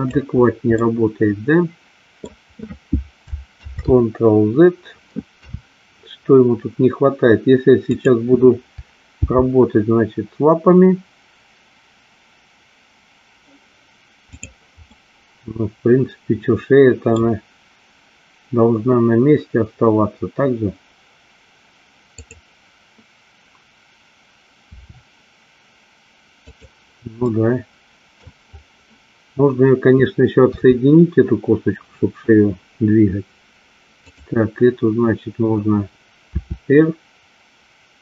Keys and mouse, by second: 0.8-2.3 middle drag, 3.8 ctrl+z, 5.6 KP_3, 7.9 click, 9.3 g, 15.0-17.3 middle drag, 22.2 click, 24.7 r, 26.6 click, 27.3-28.3 middle drag, 30.6 KP_3, 34.2 click, 36.3 r.